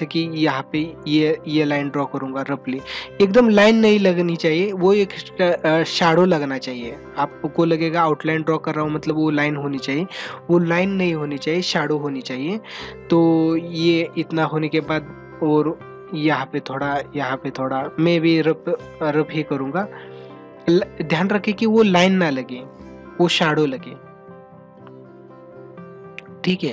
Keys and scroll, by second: 5.1 ctrl+-, 11.2 ctrl+-, 13.0 ctrl+-, 13.8 space, 17.8 ctrl+-, 19.8 ctrl+alt+z, 22.5 ctrl+alt+z.